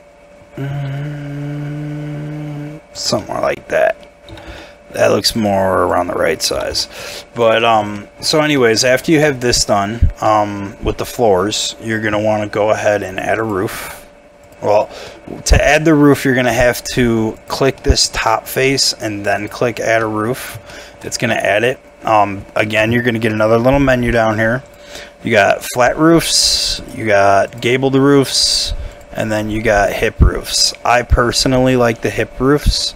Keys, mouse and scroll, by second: 3.2 middle click, 4.3 g, 4.5 y, 6.5 g, 6.7 y, 7.4 double click, 7.6 middle click, 7.9 shift+middle click, 8.3 shift+scroll up 1, 8.5 middle click, 9.3 shift+middle click, 9.9 scroll up 1, 10.1 scroll down 1, 10.2 middle click, 10.7 Tab, 15.1 middle click, 15.5 scroll down 1, 16.5 3, 17.8 middle click, 20.0 middle click, 20.4 scroll up 1, 20.7 shift+middle click, 21.1 scroll down 1, 21.3 middle click, 31.7 middle click.